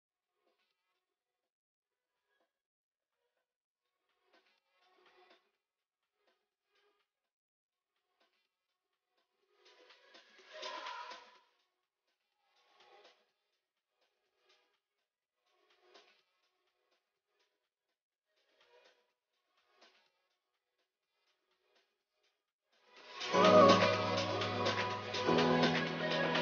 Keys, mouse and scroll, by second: 4.9 s, 6.2 click, 13.6 scroll up 1, 14.5 click, 19.9 click, 25.4-25.8 scroll up 1, 25.8 click.